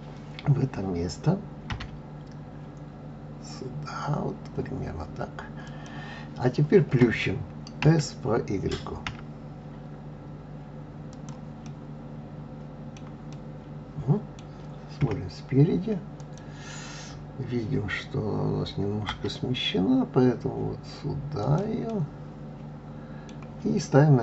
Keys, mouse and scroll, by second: 1.7 g, 11.6-15.0 middle drag, 15.0 KP_1, 16.1 click, 19.1 g, 21.9-24.2 middle drag.